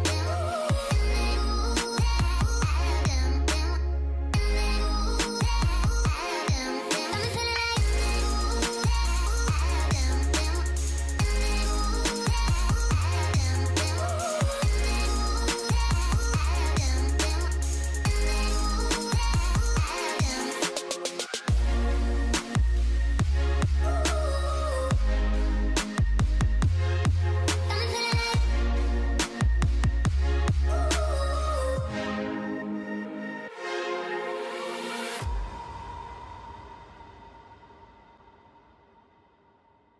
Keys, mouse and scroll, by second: 1.8-2.9 typing, 2.1 scroll down 1, 3.9 scroll up 1, 4.9 typing, 6.4 double click, 8.6 ctrl+click, 9.4 right click, 14.2 alt+scroll down 1, 15.4 alt+scroll down 1, 20.0 alt+scroll up 1, 20.6 alt+scroll down 1.